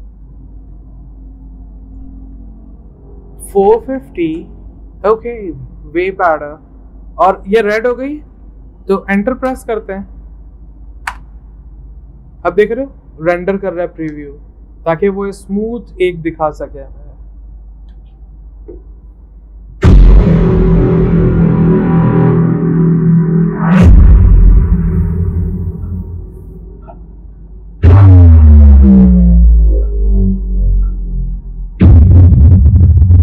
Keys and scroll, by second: 3.2-4.5 typing, 9.5 Return, 10.6-11.4 typing.